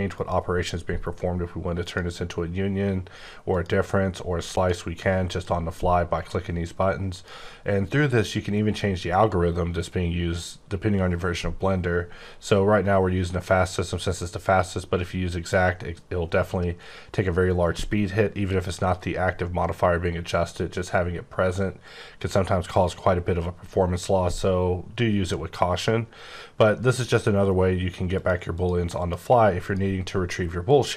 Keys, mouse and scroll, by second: 1.8 click, 3.5 click, 5.2 click, 7.1 click, 28.1 click, 28.5 click, 29.0 click, 29.6 click, 30.7 click.